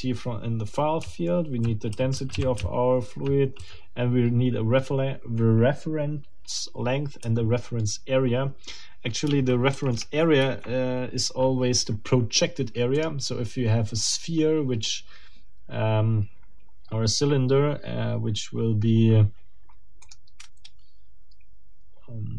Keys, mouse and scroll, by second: 1.0-3.6 typing, 7.2 j, 9.7 shift+b, 10.4 shift+Escape, 13.0 middle click, 20.0 click.